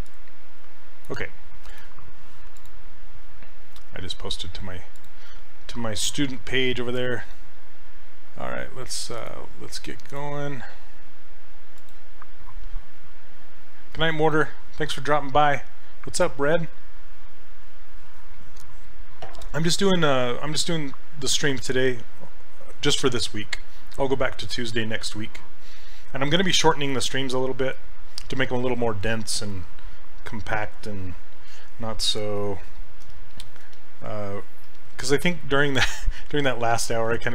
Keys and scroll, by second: 7.0 s, 32.1 s, 33.1 s, 34.7 s.